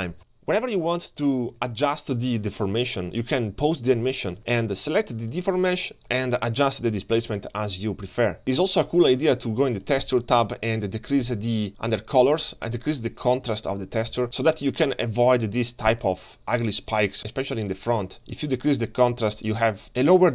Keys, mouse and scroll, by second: 0.0-0.6 scroll down 3, 0.1 middle click, 0.6-1.3 middle drag, 1.6 alt+shift+z, 2.0-2.5 middle drag, 2.8 shift+middle drag, 3.1 middle click, 3.1 shift+scroll down 1, 3.4-4.2 scroll up 1, 4.2 scroll up 1, 4.4 alt+shift+z, 5.3 click, 6.0 alt+shift+z, 6.4-9.1 shift+drag, 10.1 click, 11.9 click, 12.2-12.6 scroll down 4, 13.6 shift+click, 17.8-20.2 shift+drag.